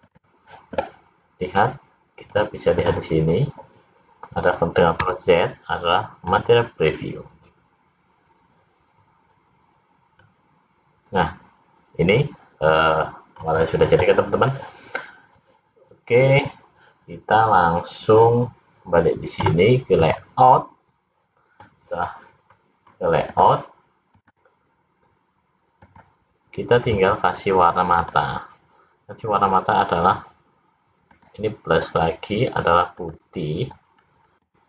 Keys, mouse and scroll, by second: 20.6 click, 22.6 middle click, 23.4 click, 26.1 click, 27.5 click, 28.1 click, 31.2 click, 33.0 click.